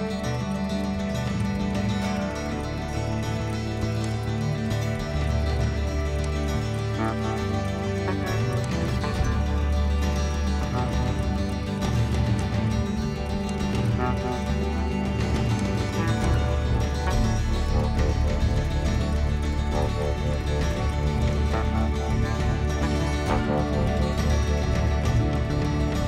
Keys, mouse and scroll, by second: 3.9 click, 15.5 click, 16.2 click, 17.8 ctrl+z, 18.1 ctrl+z, 18.7 ctrl+z, 19.1 ctrl+z, 19.7 ctrl+z, 20.7-21.9 ctrl+z, 22.2 ctrl+z.